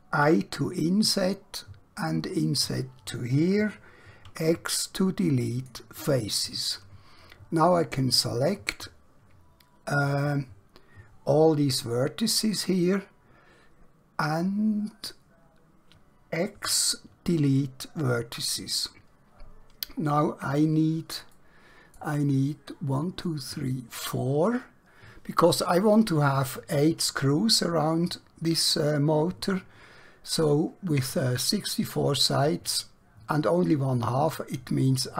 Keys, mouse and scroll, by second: 0.2 i, 2.5 click, 4.2 x, 5.5 click, 10.2 click, 16.6 x, 17.4 click, 20.1-21.2 scroll up 1, 21.4 shift+middle click.